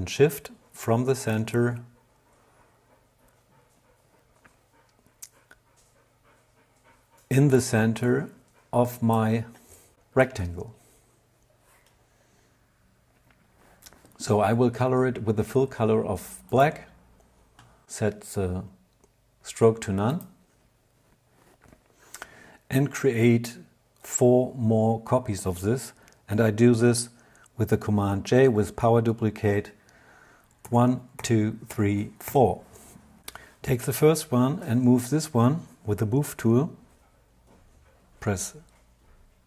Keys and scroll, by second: 29.5 super+j, 30.3 super+j, 31.3 super+j, 39.2 v.